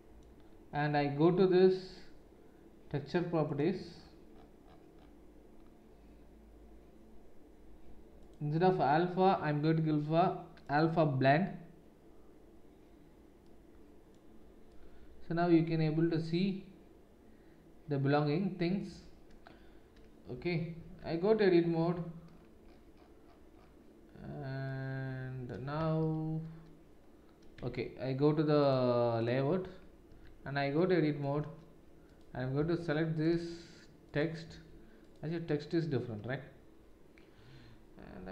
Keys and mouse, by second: 3.5-8.2 middle drag, 8.2-28.6 drag, 20.7 Tab, 26.0 shift+z, 27.6 Tab, 28.6-34.0 middle drag, 30.0 Tab, 34.0 click, 34.4 Tab, 34.4 middle click, 35.0 click, 35.1-38.3 middle drag, 38.2 z.